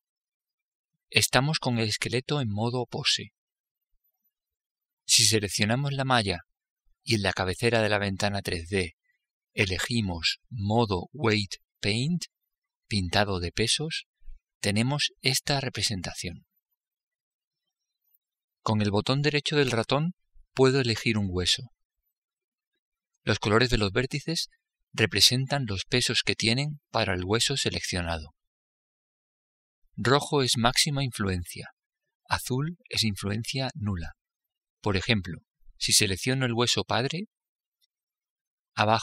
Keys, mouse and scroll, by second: 4.8-8.5 right drag, 8.5 click, 20.9-24.2 right drag, 37.3-39.0 right drag.